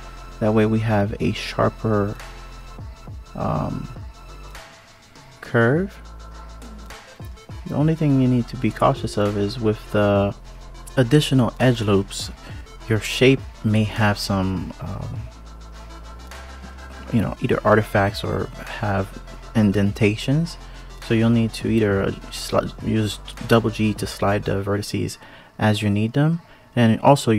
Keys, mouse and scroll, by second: 1.1 click, 1.5 shift+click, 2.0 click, 3.9 KP_3, 4.7 KP_1, 5.7-6.7 scroll up 2, 6.9 ctrl+KP_3, 7.5-8.7 scroll up 1, 8.7 click, 9.4 shift+click, 10.3 g, 13.2 click, 13.9 shift+click, 14.8 click, 15.2 alt+z, 15.7 click, 18.1 alt+z, 19.0 g, 21.1 click, 22.0 alt+z, 23.1 click, 24.1 shift+click, 26.5 alt+z.